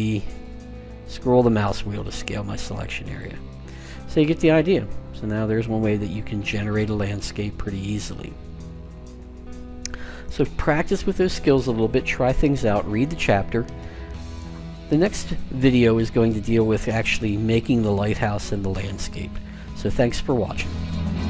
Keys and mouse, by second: 3.5-5.3 middle drag.